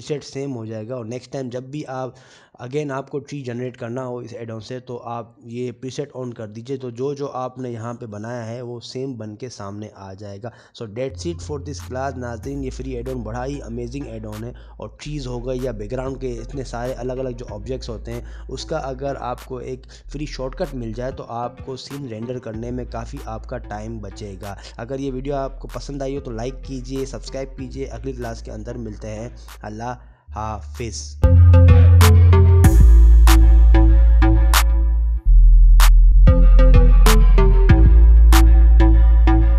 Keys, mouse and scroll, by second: 5.8-6.1 scroll up 6, 6.1 shift+middle click, 11.0 scroll down 4, 12.1 scroll down 2, 15.7 scroll up 3, 16.5 click, 17.2 middle click, 21.5 scroll down 1, 22.2 scroll down 2, 22.3 middle click, 29.8-30.4 scroll up 7, 30.5-31.2 scroll down 6.